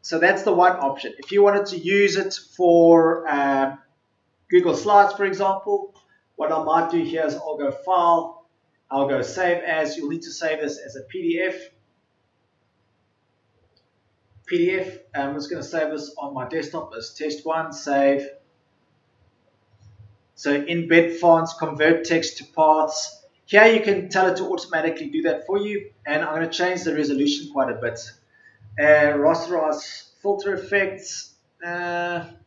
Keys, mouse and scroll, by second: 1.1 Delete.